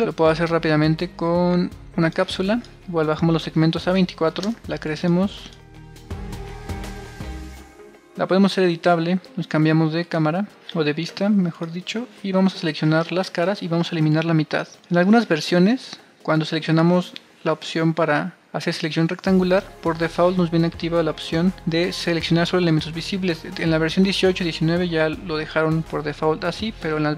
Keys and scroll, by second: 3.0-3.9 typing, 5.4-6.9 typing, 8.9 c.